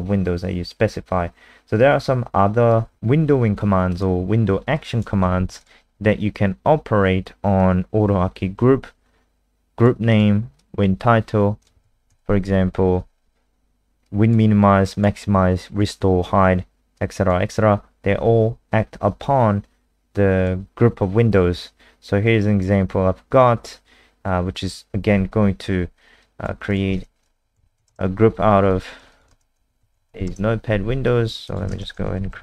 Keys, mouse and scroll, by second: 2.6 click, 5.3 ctrl+c, 5.6 click, 7.5 click, 11.8 ctrl+v, 12.0 ctrl+s, 14.0 click, 27.1-28.3 typing, 28.7 alt+click, 29.1 click, 29.3 alt+space, 29.5-30.7 typing, 31.0 alt+click, 31.4 click, 31.7 ctrl+alt+space, 31.9-32.4 typing.